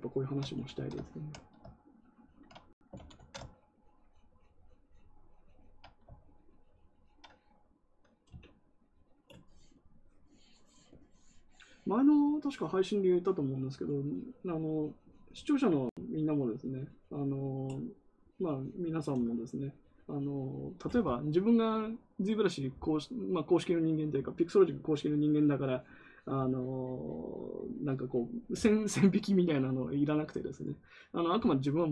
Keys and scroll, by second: 0.5 ctrl+z, 0.7 ctrl+z, 3.1 ctrl+z.